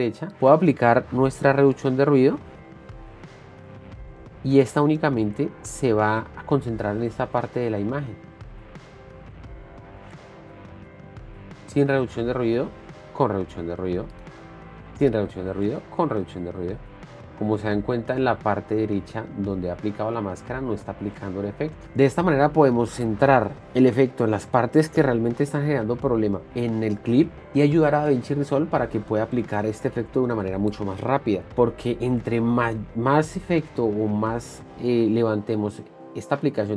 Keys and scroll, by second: 11.6 ctrl+d, 13.3 ctrl+d, 15.0 ctrl+d, 17.2 ctrl+d, 18.7 ctrl+d, 20.0 ctrl+d.